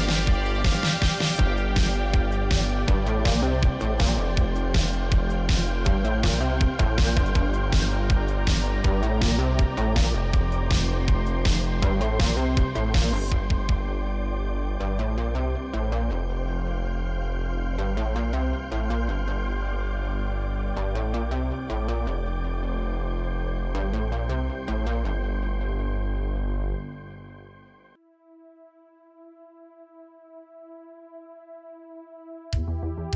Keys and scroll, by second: 1.2 shift+s, 1.4 Tab, 2.2 Tab, 2.7 shift+s, 3.5 Tab, 5.1 Tab, 5.6 2, 7.6 ctrl+z, 11.2 shift+s, 11.7 Tab, 14.4 Tab, 15.4 shift+s, 20.2 Tab, 26.7 Tab, 27.3 g, 28.5 s, 30.2 ctrl+Tab, 31.9 r, 32.1 z.